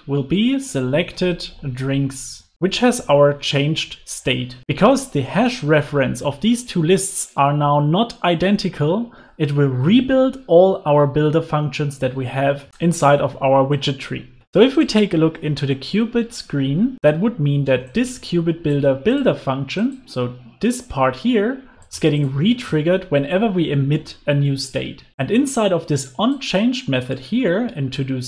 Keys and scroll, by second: 2.5 super+s, 14.3 super+s, 23.9 super+s.